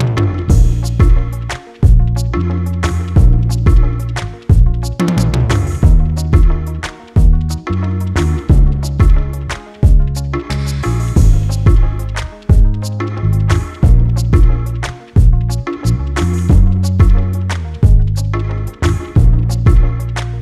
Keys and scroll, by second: 4.0 ctrl+z, 19.2 space, 20.2 space.